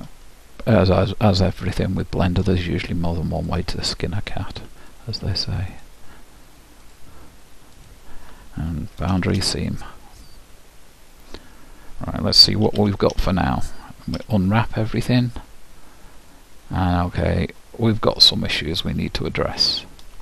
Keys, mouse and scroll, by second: 3.6-9.9 drag, 9.3 shift+', 10.9-13.9 middle drag, 12.8 a, 13.3 a, 14.3 u, 16.8-20.2 middle drag.